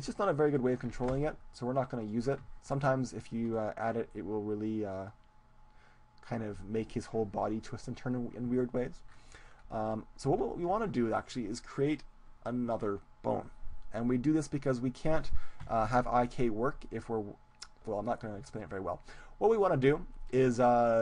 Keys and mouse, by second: 1.1 ctrl+z, 1.1-4.1 drag, 4.1-9.5 middle drag, 10.3 Tab, 10.7 middle click, 10.9 middle click, 12.0-13.7 middle drag, 14.6-16.3 middle drag, 15.6 KP_1, 20.3-21.0 right drag.